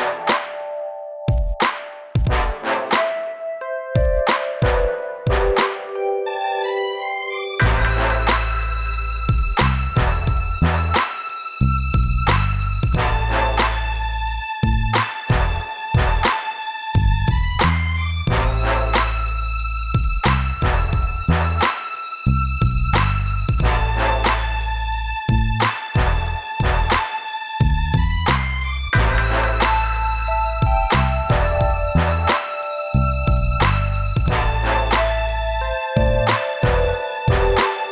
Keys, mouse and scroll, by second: 2.2 scroll up 2, 3.1 scroll down 2, 5.9 click, 6.6 right click, 7.4 click, 8.5 click, 11.0 click, 14.0 click, 15.9 scroll up 2, 16.8 click, 17.5 click, 18.6 middle click, 19.7 scroll up 1, 20.8 click, 21.8 click, 23.7 click, 25.1 click, 25.7 click, 26.8 scroll down 3, 27.5 scroll up 3, 28.7 click, 30.4 click, 31.8 click, 33.1 click, 34.5 click, 35.9 click, 36.7 scroll down 2.